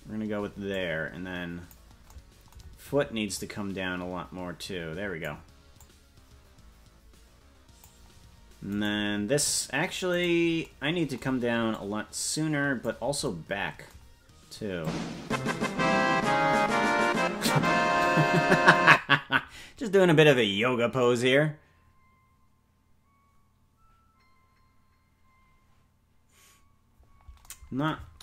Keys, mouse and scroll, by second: 0.7-1.8 drag, 3.3-5.3 drag, 5.8-7.9 drag, 8.8 right click, 10.6 right click, 11.7-12.9 drag, 14.8-17.7 drag.